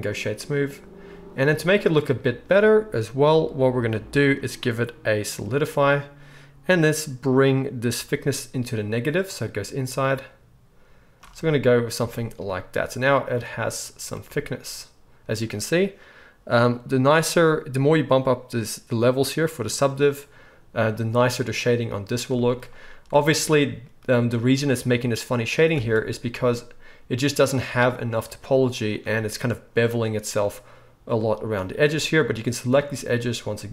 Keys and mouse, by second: 12.0 shift+drag, 12.0 shift+right drag, 23.1 Tab, 25.7 alt+a, 28.8-33.7 alt+shift+right drag.